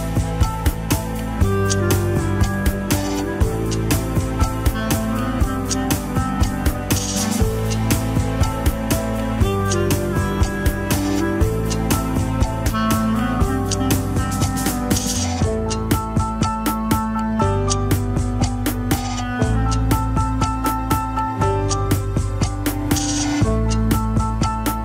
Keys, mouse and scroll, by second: 0.6 ctrl+KP_Subtract, 3.3 ctrl+KP_Add, 4.5 Tab, 5.4 shift+middle click, 6.1 scroll up 1, 6.4-7.8 shift+middle drag, 7.8 Tab, 8.8 Tab, 9.5 Tab, 10.1 Tab, 10.8 Tab, 11.5 click, 12.1 Tab, 12.9 click, 13.6 Tab, 13.9-15.5 middle drag, 15.5-16.9 drag, 16.9 Tab, 17.9 Tab, 18.8 click, 19.4 Tab, 20.5 alt+z, 21.3 ctrl+click, 21.4 alt+z, 21.8 Tab, 22.8 click, 23.3 Tab, 23.4-24.4 middle drag, 24.4 ctrl+click.